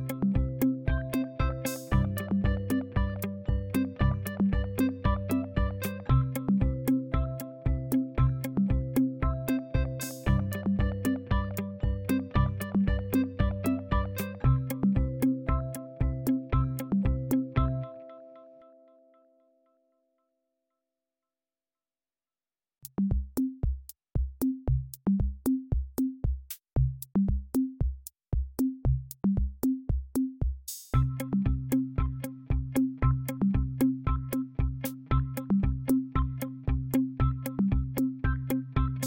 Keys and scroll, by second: 32.9-34.3 typing, 35.7-36.8 typing, 38.1 ctrl+a.